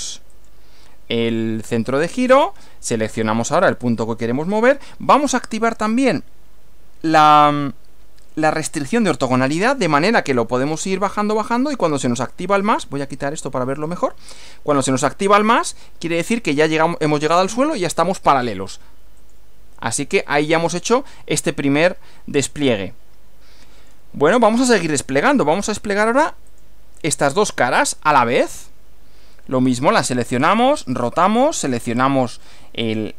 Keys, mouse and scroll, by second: 0.4 click, 3.6 click, 7.3 click, 13.8 click, 19.2 click, 20.2 scroll down 1, 21.5-24.1 middle drag, 24.4 middle click, 26.5 click, 27.4 ctrl+click, 30.8 click, 32.8 click.